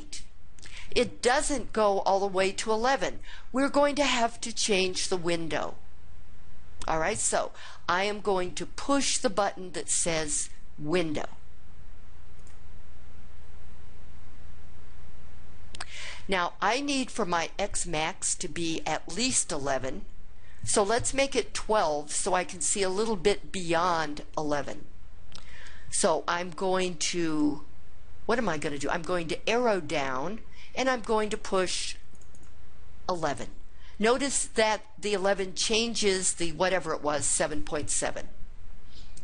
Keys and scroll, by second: 29.6 Down, 32.2 1, 32.4 1.